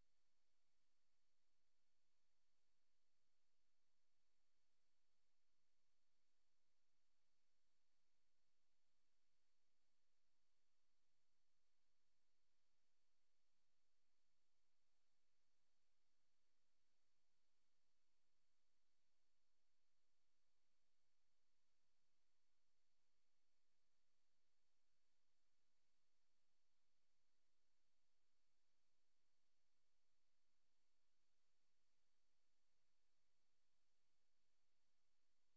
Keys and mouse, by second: 0.0 Right, 0.8 click, 2.8 click, 3.6 click, 5.6 click, 7.3 click, 9.0 ctrl+z, 9.3 ctrl+z, 10.1 click, 12.9 click, 13.6 click, 15.2 Return, 16.8 click, 19.3 click, 20.3 click, 20.9 click, 21.5 click, 22.2 click, 22.7 click, 23.4 click, 24.2 click, 25.1 click, 26.9 click, 28.3 click, 28.9 click, 30.3 click, 32.0 click, 32.5 click, 32.8 click, 33.6 click, 34.1 click, 34.5 click.